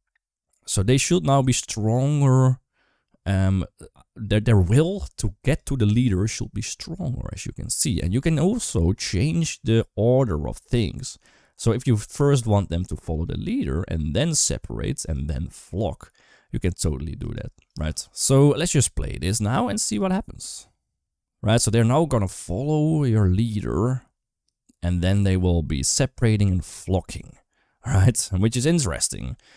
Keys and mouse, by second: 5.3 click, 7.5 click, 7.8 space, 12.9 click, 18.0 click, 19.1 click, 20.2 space.